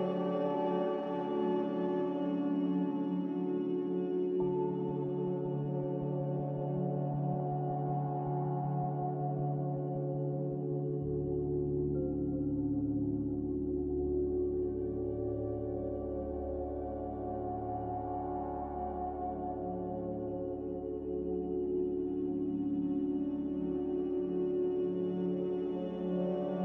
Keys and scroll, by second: 0.9 z, 8.6 z, 9.9-10.7 typing, 13.5 x, 13.9 a, 18.6 n, 23.6 z.